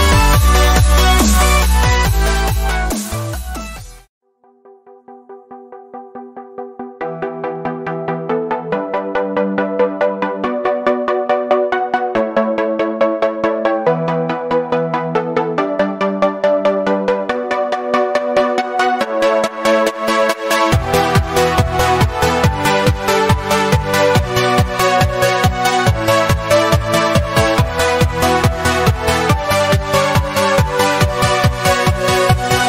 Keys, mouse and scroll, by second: 11.4 v, 13.6 g, 24.1 ctrl+Num_Lock, 25.5 e.